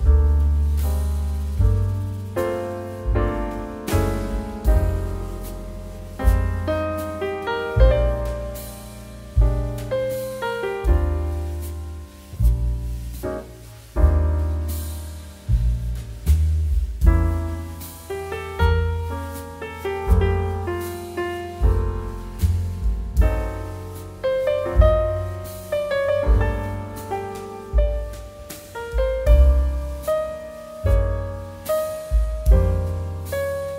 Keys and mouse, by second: 0.3 shift+middle click, 3.1 shift+middle click, 3.4 click, 8.5 click, 10.0 shift+middle click, 10.5 shift+middle click, 11.9 click, 15.6 shift+middle click, 16.3 shift+middle click, 16.8 middle click, 17.3 click, 18.0 click, 19.1 middle click, 19.3 shift+middle click, 19.8 middle click, 20.0 shift+middle click, 20.4 click, 20.6 middle click, 20.9 shift+a, 22.6 click, 24.9 middle click, 25.3 shift+middle click, 27.2 click, 27.8 g, 28.5 shift+z, 28.9 click, 29.1 g, 30.6 click, 31.0 middle click, 31.2 shift+middle click, 31.6 middle click, 32.1 click.